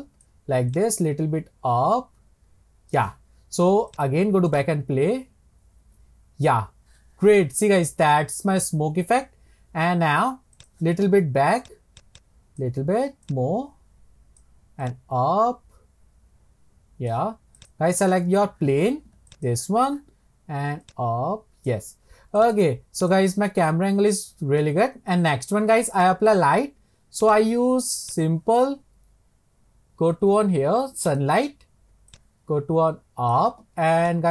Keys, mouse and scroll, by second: 3.9-7.6 drag, 10.6-12.6 drag, 13.2-17.7 drag, 19.3 click, 20.8 click, 22.4-27.3 drag, 28.1-31.2 drag, 34.0 click.